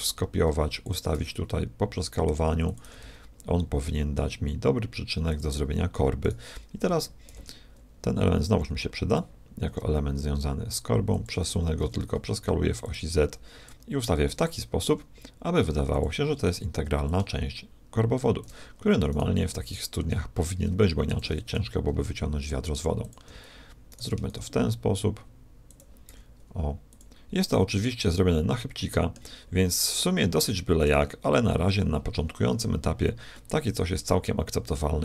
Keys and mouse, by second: 1.2 s, 2.8 s, 6.2-8.0 drag, 7.3 shift+d, 9.6 r, 11.8 s, 13.6-15.5 drag, 14.9 s, 17.0-18.8 drag, 19.2-20.8 drag, 19.9 shift+d, 21.5 r, 23.9 click, 24.3 shift+d, 26.1 s, 27.5-29.1 middle drag, 29.6-32.1 middle drag, 33.3 middle click, 33.7-35.0 middle drag.